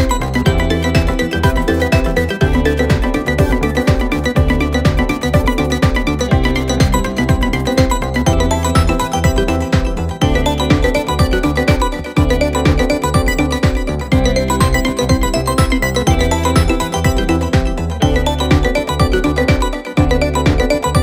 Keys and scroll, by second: 0.5 F1, 1.1 1, 1.8 F1, 3.2 ctrl+d, 6.3 ctrl+d, 8.4 p, 12.2 F1, 12.7 F2, 17.8 F1, 18.6 F1.